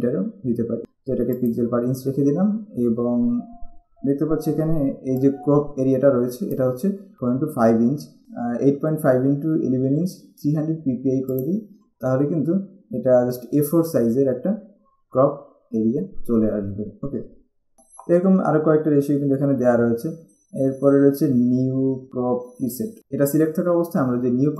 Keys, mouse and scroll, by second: 1.6 click, 5.3 click, 11.5 click, 14.0 click.